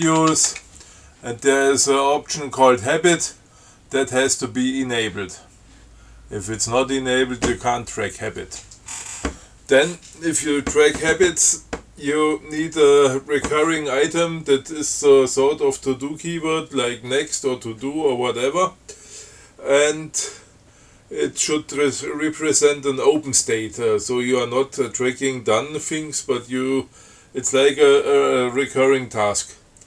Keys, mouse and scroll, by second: 0.0-1.2 typing, 6.8 click.